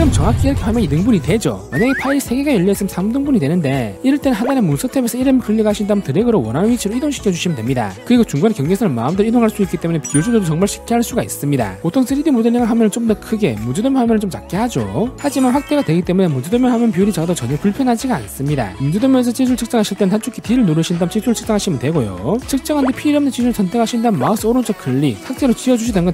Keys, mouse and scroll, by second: 2.0 click, 2.7 click, 3.5 click, 6.1-7.1 drag, 7.9 click, 8.5 right click, 9.7-11.1 right drag, 11.3 right click, 11.5-12.1 scroll up 3, 12.2 middle click, 12.5 d, 13.0 click, 13.6 click, 14.0 middle click, 14.9 click, 15.1-15.6 scroll up 4, 15.3 middle click, 16.2 click, 16.8 click, 17.0 middle click, 18.4 click, 19.3 click, 20.4 click, 20.9 middle click, 21.3 middle click, 21.7 click, 22.1 middle click, 22.6 shift+click, 23.1 shift+right click, 24.3 right click, 25.4 right click.